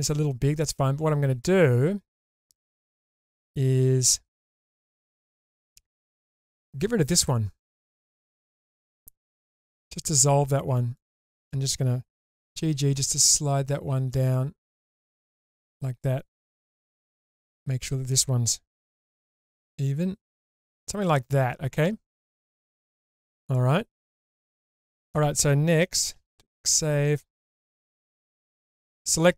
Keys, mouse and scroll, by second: 0.2 click, 4.5 2, 6.5 click, 9.3 ctrl+x, 10.9 click, 12.5 g, 12.7 g, 15.4 click, 16.7 1, 17.3 click, 18.9 g, 19.1 g, 20.6 click, 22.4-25.1 middle drag, 26.1 ctrl+s, 27.8 2, 28.6 alt+click.